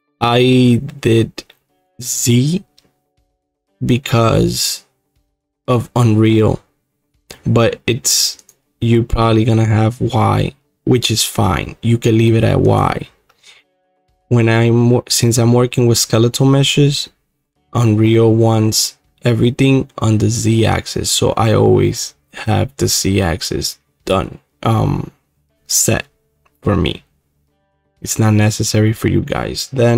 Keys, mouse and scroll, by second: 8.5-17.8 drag, 21.0-26.1 drag.